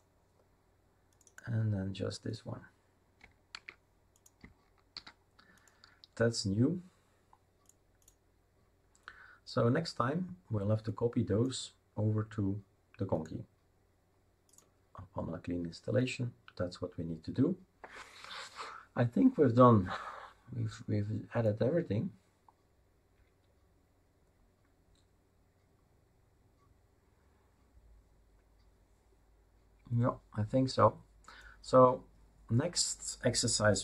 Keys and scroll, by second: 3.5 ctrl+c, 4.9 ctrl+v.